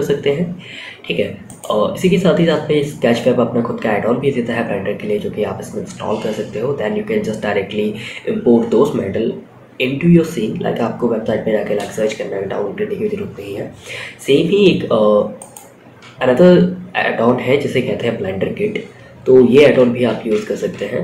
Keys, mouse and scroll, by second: 0.8-2.0 drag, 14.7 click.